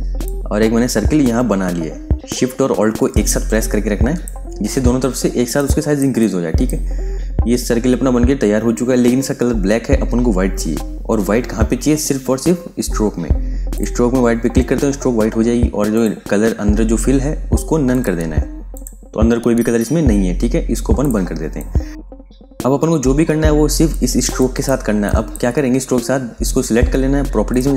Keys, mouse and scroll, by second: 0.1 alt+click, 4.1 alt+shift+Num_Lock, 5.2 space, 5.5 ctrl+alt+click, 7.4 v, 13.6 click, 20.8 click, 21.3 space, 21.4 click, 23.4 space, 23.8 click.